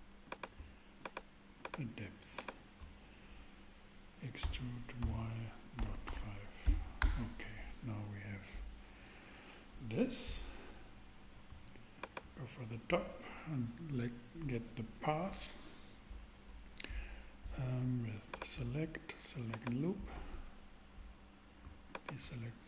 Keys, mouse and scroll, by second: 4.4 e, 5.0 y, 5.7 ., 6.0 5, 7.0 Return.